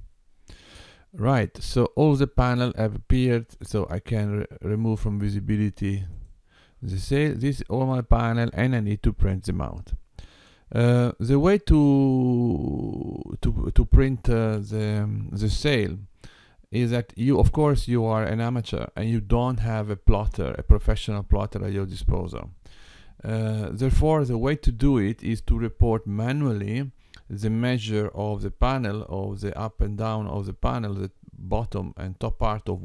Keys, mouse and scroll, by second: 6.1 click.